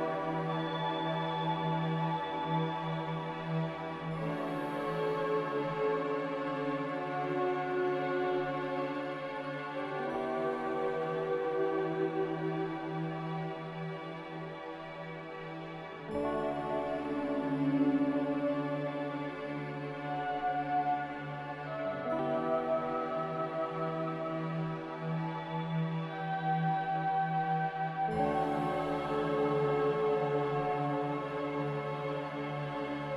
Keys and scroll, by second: 3.1 ctrl+v, 3.6 z, 4.7 Delete, 6.6 Delete, 8.1 Escape, 10.7 typing, 13.5-17.2 typing, 22.1 m.